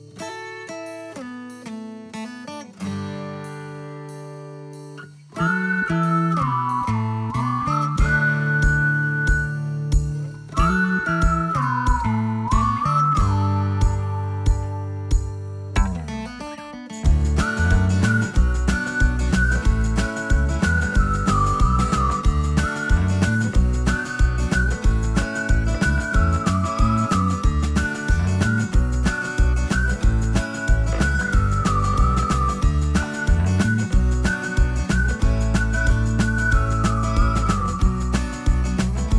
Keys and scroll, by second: 7.7 ctrl+x, 23.2 alt+q, 25.5 m, 39.0 space.